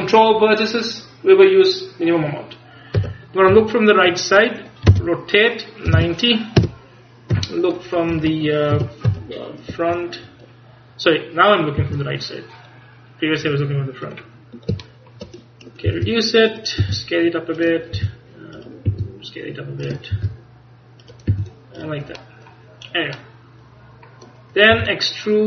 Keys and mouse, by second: 3.1 KP_3, 3.6 KP_1, 5.0 r, 7.4 KP_1, 8.2 Escape, 8.8 KP_1, 9.1 KP_3, 11.9 s, 14.4 click, 15.9 click, 15.9 g, 16.9 click, 16.9 s, 18.0 g, 18.9 s, 20.2 g, 21.4 s, 22.8 middle click, 23.7 middle click, 25.0 e.